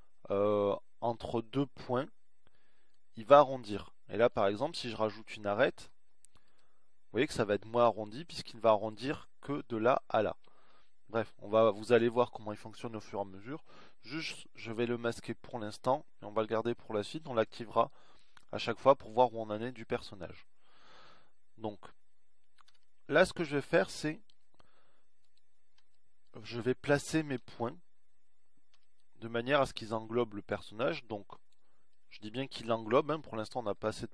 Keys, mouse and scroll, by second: 6.0 ctrl+r, 11.4 ctrl+z, 20.5 KP_1, 23.1 z, 27.8 a, 29.2 b.